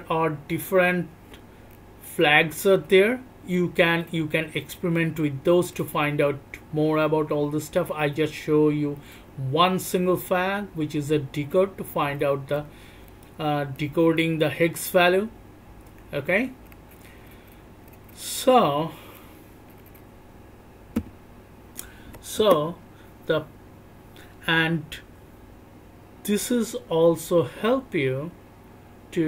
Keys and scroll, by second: 0.0-3.2 typing, 0.3 alt+o, 1.1 alt+o, 1.6 alt+o, 2.4 alt+o, 3.2 alt+o, 4.2 alt+o, 4.2-8.0 typing, 4.9 alt+o, 5.4 alt+o, 6.2 alt+o, 6.8 alt+o, 7.4 alt+o, 8.0 alt+o, 10.0 alt+o, 10.0-13.4 typing, 10.6 alt+o, 11.2 alt+o, 11.8 alt+o, 12.3 alt+o, 12.5 alt+o, 13.1 alt+o, 13.4 alt+o, 15.3 b, 16.7 Return.